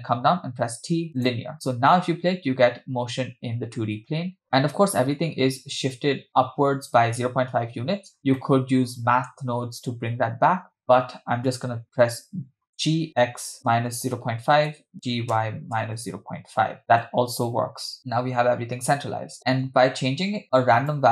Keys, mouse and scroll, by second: 1.5 t, 8.1 space, 8.1 scroll down 2, 8.4 middle click, 13.3 g, 15.3 g, 19.6 space, 20.4 middle click, 20.4 space, 20.6 space, 20.9-21.1 drag.